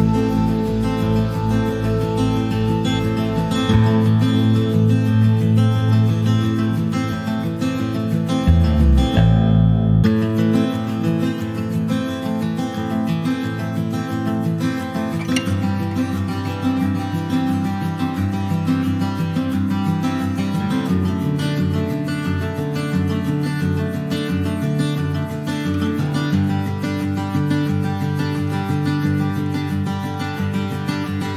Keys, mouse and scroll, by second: 0.5-3.2 drag, 4.5-5.9 middle drag, 5.9 click, 6.3-6.8 scroll up 1, 6.8 click, 7.8-9.7 alt+middle drag, 9.7 r, 10.8 Tab, 11.6 a, 12.0 alt+middle click, 12.4 alt+middle click, 12.5-13.1 alt+scroll up 1, 13.3 middle click, 13.4-14.6 scroll up 6, 13.7 shift+middle click, 14.4 shift+middle click, 15.5 r, 18.6 alt+middle click, 18.8-19.2 scroll up 1, 19.2 shift+middle click, 19.5-19.9 scroll down 3, 19.9 shift+middle click, 20.4 shift+middle click, 21.1 r, 25.7 click, 28.7 middle click, 29.0 Tab, 29.1 click, 29.5-30.9 shift+middle drag, 30.9 Tab, 31.2 click.